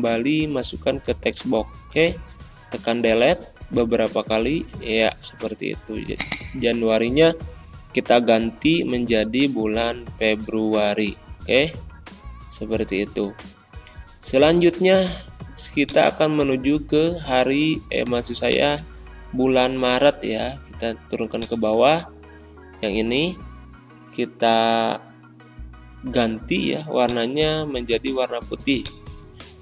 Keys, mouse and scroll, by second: 22.2 ctrl+scroll up 1, 27.0 click, 29.1 click.